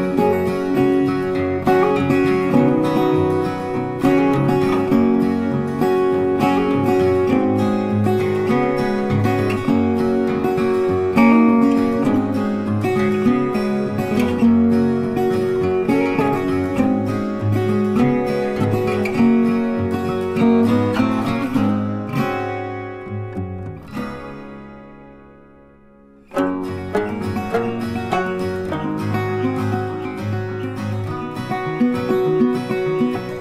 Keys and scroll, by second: 24.8 ctrl+t.